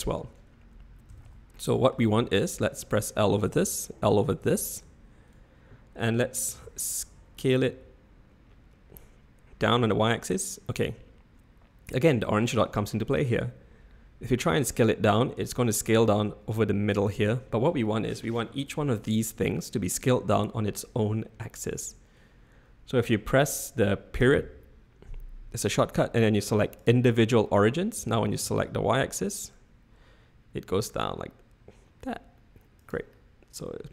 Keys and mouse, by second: 1.1 a, 1.2 a, 1.5 middle click, 3.5 l, 4.4 l, 6.5 s, 28.0 s, 33.2-33.9 drag.